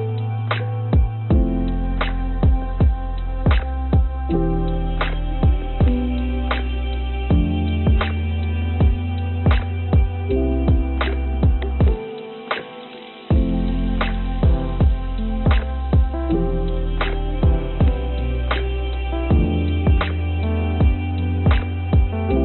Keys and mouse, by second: 1.7-3.5 middle drag, 4.6 i, 8.4 e, 10.1-12.4 drag, 13.4 click, 14.7-16.5 drag, 21.3 click.